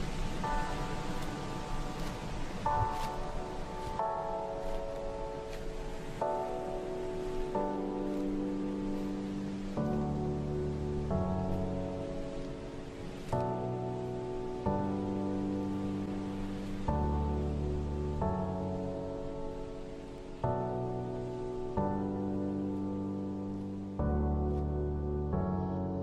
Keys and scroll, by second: 1.6 shift+Right, 1.9 shift+Right, 2.0 shift+Right, 4.6 shift+Right, 4.8 shift+Right, 7.1 shift+Right, 14.0 shift+Left, 14.2 shift+Left, 14.3 shift+Left, 17.1 ctrl+g, 23.8 typing, 24.9 typing, 25.3 Return.